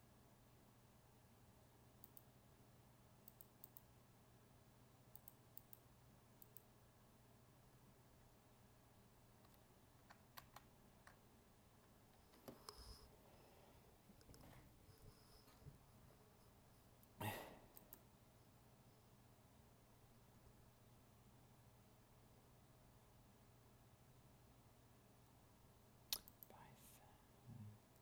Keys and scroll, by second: 10.3 ctrl+z.